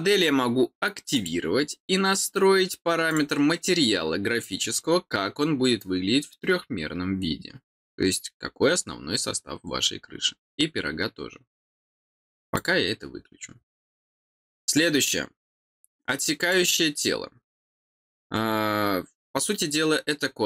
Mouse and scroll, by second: 1.1 click, 3.0 click, 12.5 click, 16.4 click.